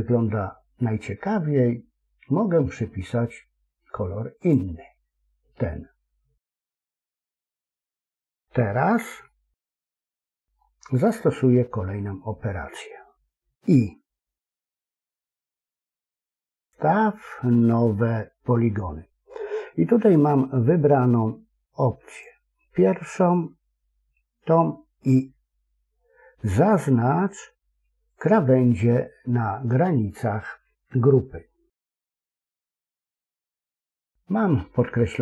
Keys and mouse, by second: 4.3 click, 8.3 middle click, 9.2 shift+middle click, 10.0 middle click, 11.1-12.5 middle drag, 14.5 i, 22.0 click, 28.0 click, 34.2 middle click.